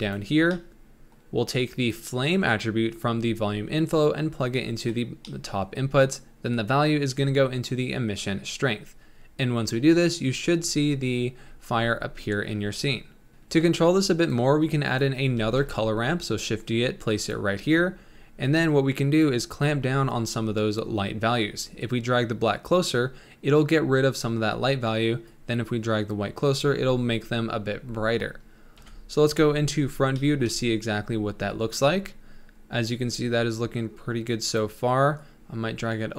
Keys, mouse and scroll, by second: 1.1 middle click, 1.5 click, 3.5 click, 5.3 middle click, 6.2 scroll up 2, 6.5-7.7 drag, 9.0 scroll up 1, 9.6 scroll up 2, 13.4 middle click, 13.9 click, 14.9 click, 15.4 shift+d, 18.0-18.4 scroll up 5, 18.4-24.8 drag, 25.2-28.8 drag, 28.8 KP_1, 30.1 shift+middle click, 30.5 scroll up 3, 33.4-36.1 drag.